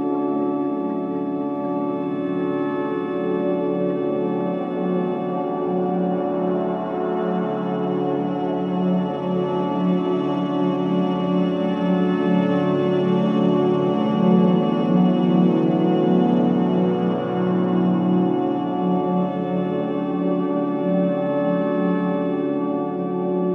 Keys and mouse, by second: 1.9 1, 2.2 5, 2.6 Return, 4.0-4.9 drag, 4.4 space, 9.5 space, 10.6 ctrl+s, 11.5 click, 11.8 click, 12.4 ctrl+alt+click, 13.0 alt+shift+click, 13.7 alt+click, 14.1-14.5 typing, 14.5-17.1 alt+shift+drag, 17.2 0, 18.1-19.3 ctrl+alt+drag, 19.1 ctrl+s, 20.0-21.2 drag, 21.6 click.